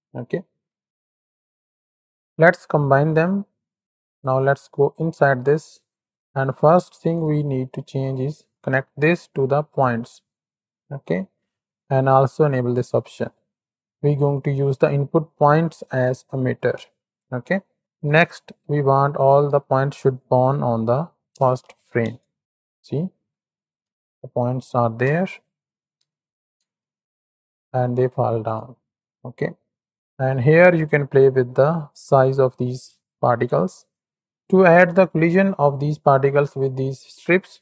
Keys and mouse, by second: 1.0-1.4 ctrl+shift+drag, 3.1-4.3 drag, 4.7 Tab, 5.6 click, 7.1 click, 8.0-9.9 drag, 10.7 click, 12.7 click, 17.9 click, 19.1-22.0 drag, 22.4 middle drag, 23.6 z, 25.0 KP_1, 25.9 ctrl+KP_3, 26.6 space, 28.0 space, 28.4 click, 31.0 click, 33.6 click, 34.2 click, 37.5 shift+a.